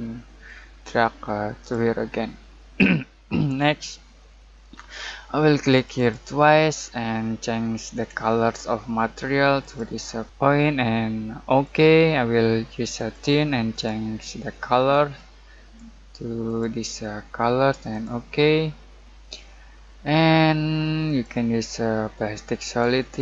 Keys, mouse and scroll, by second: 4.8-5.7 typing, 5.7 click, 11.4-16.4 drag, 11.4 typing, 21.0 typing, 21.0 click.